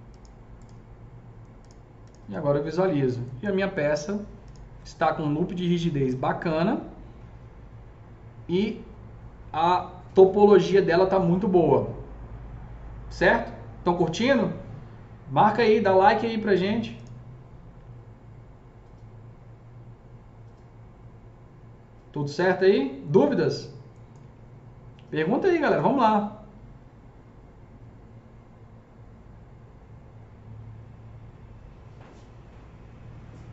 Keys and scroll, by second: 3.6 F3, 5.8 F3, 6.0 F4.